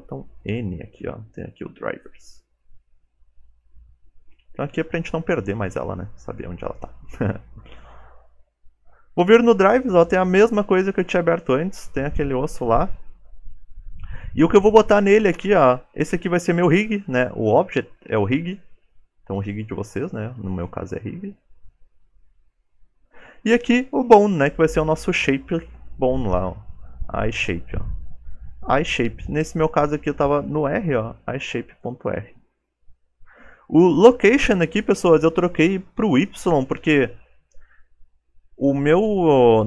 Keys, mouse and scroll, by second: 1.4 click, 2.5 shift+middle click, 3.1-3.7 scroll up 3, 3.6 shift+middle click, 15.3 click, 36.6 click.